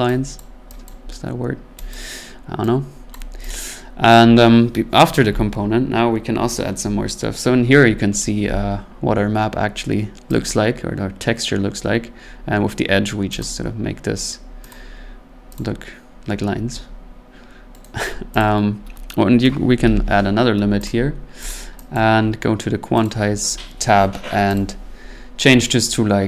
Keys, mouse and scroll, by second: 0.4 click, 0.8 click, 1.1-1.5 scroll, 1.9 click, 2.9 scroll down 3, 3.1 click, 3.6 click, 5.7 scroll, 6.3 scroll, 7.3-8.2 scroll, 8.2-10.0 scroll, 10.4 click, 12.0-12.5 scroll, 12.9-13.3 scroll, 13.4 click, 13.7 scroll, 14.7 click, 15.5 click, 17.8 right click, 18.4 click, 20.0-20.8 typing, 20.8 click, 21.5 click, 21.9 click, 23.0 click, 24.5 click.